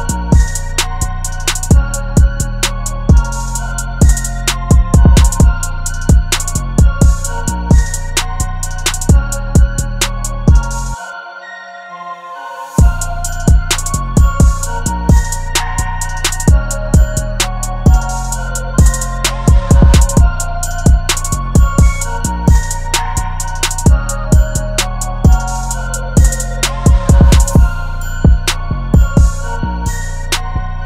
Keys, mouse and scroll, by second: 8.3 [, 11.8 double click, 13.1-14.6 typing, 16.8 double click, 23.3 double click, 25.0 alt+click.